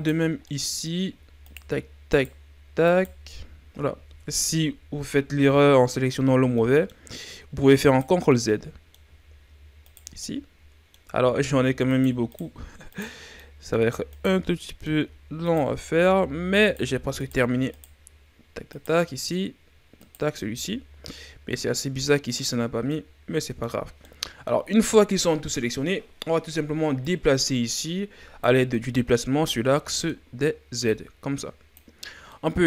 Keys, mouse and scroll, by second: 0.2 scroll down 1, 0.5 middle click, 1.4 shift+right click, 2.1 shift+right click, 2.9 right click, 4.0 ctrl+z, 5.4 ctrl+z, 6.0-6.6 ctrl+scroll up 4, 6.6 middle click, 7.0-7.9 scroll up 2, 7.9 shift+right click, 8.3-9.9 middle drag, 9.9 shift+right click, 10.2-11.9 middle drag, 11.9 shift+right click, 12.3 shift+right click, 12.9 shift+right click, 13.4 middle click, 14.1 shift+right click, 14.5 scroll down 1, 14.6 middle click, 15.5 shift+right click, 16.6 shift+right click, 17.2 shift+right click, 17.7 shift+right click, 18.7 shift+right click, 20.0 shift+right click, 20.4-21.6 middle drag, 21.6-22.6 scroll up 2, 22.6 scroll up 1, 22.6 scroll down 4, 22.9-27.0 middle drag, 27.0-28.7 drag, 28.7-30.9 middle drag, 30.9-32.0 drag, 32.0 scroll down 2, 32.3-32.6 middle drag.